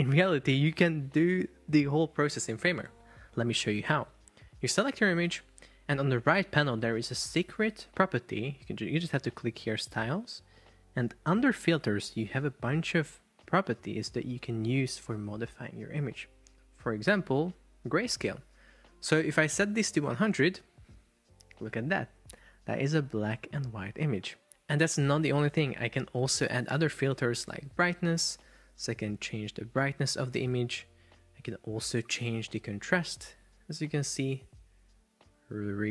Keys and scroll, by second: 4.5 super+Caps_Lock.